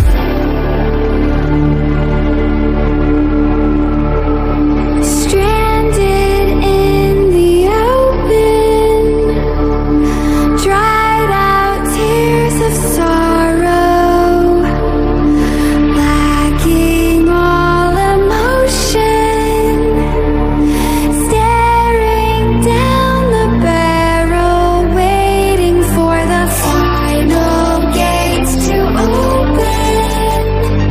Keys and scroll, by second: 5.1 ctrl+-, 9.6 ctrl+=, 11.0 ctrl+-, 13.6 ctrl+=, 16.0 ctrl+z, 17.2 ctrl+-, 18.8 ctrl+-, 20.8 ctrl+0, 21.5 ctrl+=.